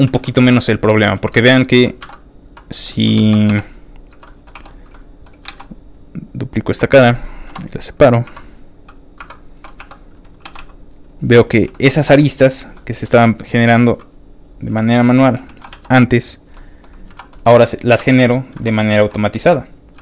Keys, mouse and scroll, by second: 0.4 alt+shift+z, 0.4 shift+middle click, 0.7 click, 1.0 middle click, 1.3 Tab, 2.3 click, 2.8 middle click, 3.1 shift+middle click, 3.6 click, 3.6 shift+x, 3.9 click, 4.1 Tab, 4.2 middle click, 4.5 3, 4.7 click, 4.9 middle click, 5.4 shift+d, 6.2 click, 7.5 p, 7.6 click, 8.2 Tab, 8.8 click, 9.2 Tab, 9.5 3, 9.9 click, 10.4 g, 11.1 click, 11.3 middle click, 11.7 shift+middle click, 12.5 shift+click, 12.7 shift+middle click, 13.0 shift+middle click, 13.2 shift+middle click, 13.2 scroll up 2, 13.3 shift+middle click, 13.5 shift+middle click, 14.4 shift+click, 14.7 alt+click, 15.1 alt+middle click, 15.6 alt+shift+middle click, 15.7 alt+shift+e, 16.3 click, 16.5 middle click, 16.9 scroll up 1, 17.0 1, 17.3 middle click, 17.5 shift+middle click, 18.1 ctrl+r, 18.1 click, 18.5 Escape, 18.9 alt+s, 19.9 click, 19.9 shift+s.